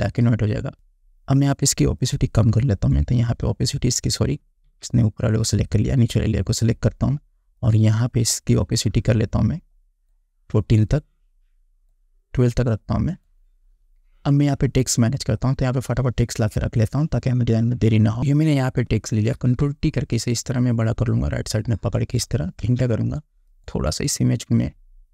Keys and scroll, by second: 0.7 ctrl+z, 4.8 ctrl+z, 19.5 ctrl+t, 22.8 Return.